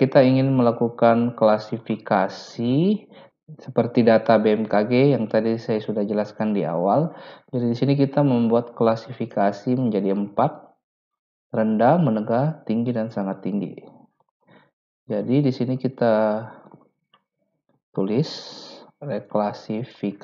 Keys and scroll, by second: 17.5-20.0 typing.